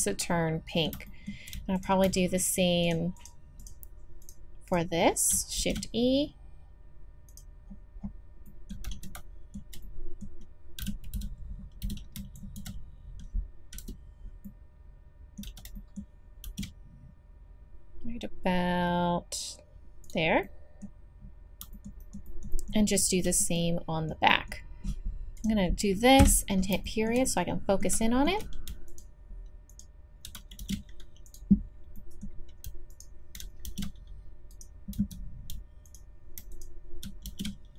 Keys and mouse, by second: 0.0 click, 1.3-2.9 middle drag, 2.9-5.6 drag, 5.6 shift+e, 8.8 z, 10.8 v, 11.8 b, 13.8 KP_Decimal, 14.4 middle click, 15.4 z, 16.4 shift+e, 20.5-21.7 drag, 21.8 click, 22.0 middle click, 22.0 click, 22.9 middle click, 23.7 middle click, 25.4 right click, 26.2 KP_Decimal, 30.6 shift+e, 33.6 shift+e, 34.9 z, 37.3 shift+e.